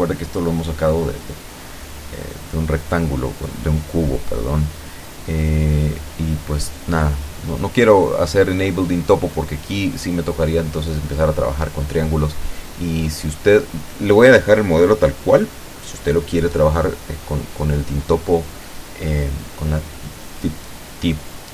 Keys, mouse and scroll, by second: 0.5-0.8 shift+scroll up 1, 1.0 shift+middle click, 2.6-2.9 scroll down 1, 2.9 scroll up 1, 3.0 scroll down 1, 3.3-4.8 scroll up 1, 6.9-7.2 scroll up 1, 7.4 scroll down 1, 7.6-8.9 scroll up 1, 9.1-10.9 ctrl+drag, 11.2 ctrl+click, 12.2 ctrl+click, 12.5-13.7 ctrl+middle drag, 13.9 ctrl+click, 15.2 ctrl+click, 15.7 ctrl+click, 16.6 ctrl+middle click, 17.6 scroll down 2, 17.7 click, 17.8-19.0 middle drag, 20.0-20.3 scroll down 2, 20.3 Tab, 20.9 scroll up 2, 21.4 shift+middle click.